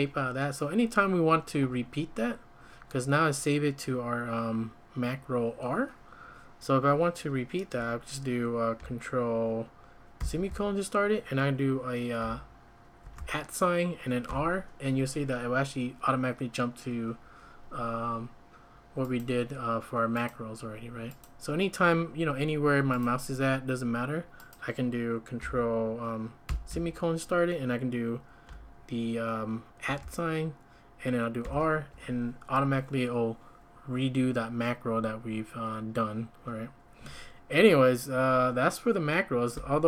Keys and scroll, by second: 10.2 ctrl+;, 13.0 shift+2, 14.3 typing, 26.5 ctrl+;, 29.8 typing, 31.2-31.9 typing, 39.5 Escape.